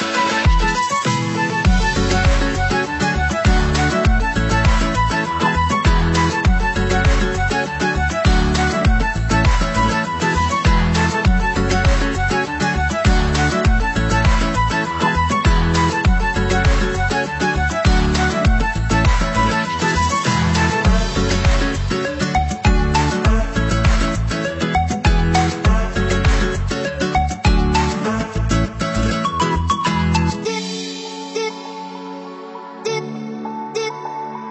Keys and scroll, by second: 5.5 ctrl+=, 13.6 ctrl+0, 21.2 ctrl+c, 21.4 ctrl+v, 24.6 ctrl+=, 31.9 ctrl+z.